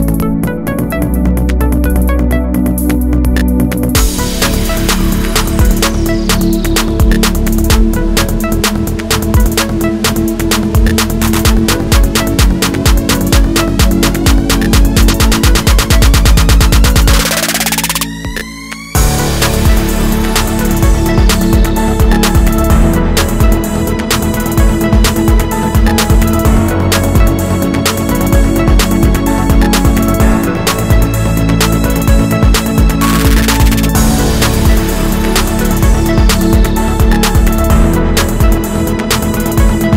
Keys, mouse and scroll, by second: 0.3 e, 1.1 click, 2.0 click, 2.4 click, 2.5 Tab, 2.8 middle drag, 3.0 scroll down 2, 3.2-3.8 middle drag, 3.8-4.7 scroll down 2, 4.7 drag, 4.8-5.6 middle drag, 5.6 drag, 5.8-15.7 middle drag, 6.1-6.8 scroll down 2, 10.3 ctrl+r, 10.4 Tab, 10.6 ctrl+r, 12.0 KP_7, 12.8-14.1 scroll up 2, 14.1 k, 15.7 click, 15.8-22.9 drag, 17.1 k, 22.9 middle click, 23.6 2, 23.7 click, 24.0 shift+click, 24.3 KP_7, 24.7 g, 25.3 click, 25.5 middle click, 26.1 3, 26.2 click, 26.3 shift+click, 26.5 x, 27.3 click, 27.4 click, 27.5-31.0 drag, 31.0-32.5 middle drag, 31.9-32.5 scroll down 2, 32.5-33.6 drag, 32.9 Tab, 33.5 Tab, 33.6 middle click, 33.8 2, 34.0 click, 34.1 shift+click, 34.3 x, 34.8 ctrl+x, 35.2 click, 35.4 click, 35.6 shift+click, 35.7 shift+click, 35.9-39.9 middle drag.